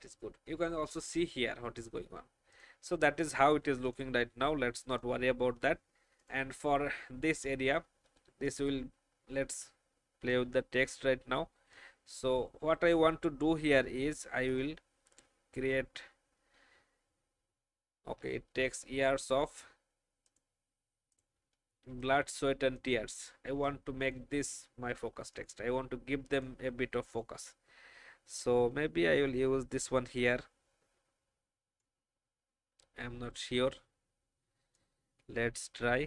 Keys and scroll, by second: 23.4 space.